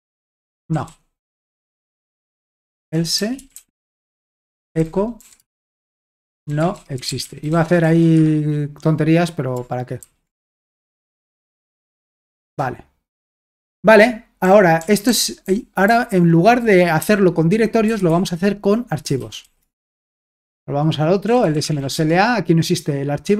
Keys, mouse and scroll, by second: 0.0-8.7 typing, 0.5 Escape, 4.2 Return, 11.5 w, 12.4 Return, 14.4-18.1 typing, 19.2 typing, 19.7 Return, 20.3 alt+Tab, 21.0-22.4 typing.